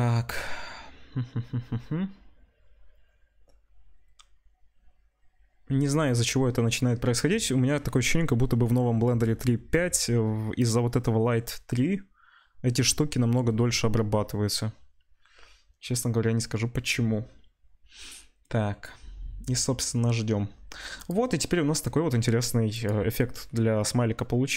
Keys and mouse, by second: 21.1-22.7 middle drag, 22.7 click, 22.8-24.5 middle drag.